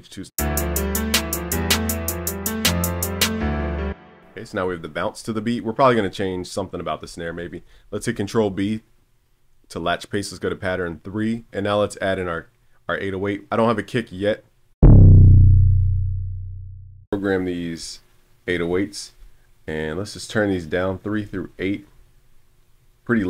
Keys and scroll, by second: 7.3 super+b.